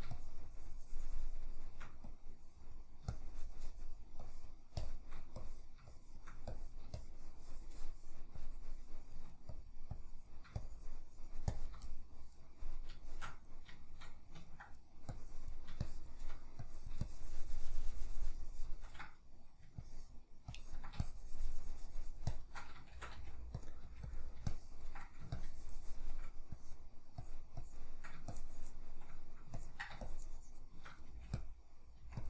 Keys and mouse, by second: 11.9-15.1 middle drag, 15.1-23.7 drag, 22.9 shift+c, 23.9 f, 24.5-31.5 ctrl+drag, 31.1 f, 32.0 f.